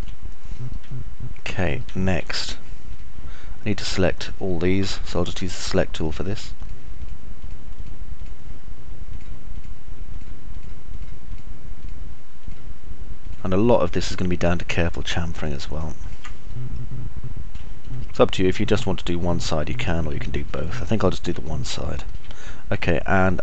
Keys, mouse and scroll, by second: 0.9 click, 0.9 middle click, 0.9 right click, 1.3 alt+click, 1.3 alt+middle click, 1.3 alt+right click, 5.9 ctrl+right click, 6.3 ctrl+right click, 6.9 ctrl+right click, 7.3 ctrl+right click, 7.8 ctrl+right click, 12.1 ctrl+right click, 13.4 ctrl+right click, 13.9 ctrl+right click, 14.3 ctrl+right click, 15.3 ctrl+right click, 16.3 ctrl+right click, 16.9-17.9 alt+middle drag, 18.1 middle click, 18.4-20.9 alt+middle drag, 19.4-20.9 alt+drag, 19.4-20.9 alt+right drag, 21.3 alt+click, 21.3 alt+middle click, 21.3 alt+right click, 22.1 alt+click, 22.1 alt+middle click, 22.1 alt+right click.